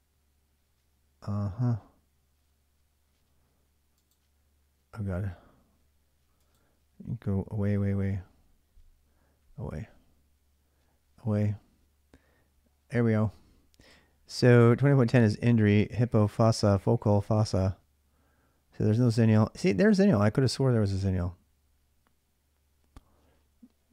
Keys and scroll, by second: 7.3 ctrl+w, 7.5 ctrl+w, 9.1 ctrl+w, 10.7 ctrl+w.